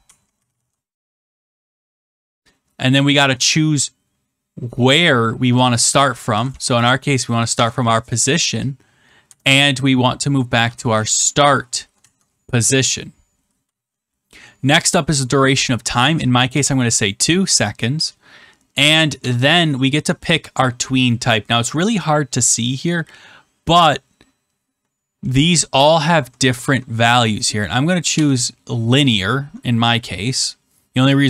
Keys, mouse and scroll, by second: 0.0-2.1 typing, 1.5 Right, 6.0-7.1 typing, 7.5 Tab, 10.2-11.6 typing, 11.9 Tab, 13.6 click, 16.4 2, 19.1 click, 25.2-26.1 scroll down 10, 27.2 scroll down 8, 28.1 Return.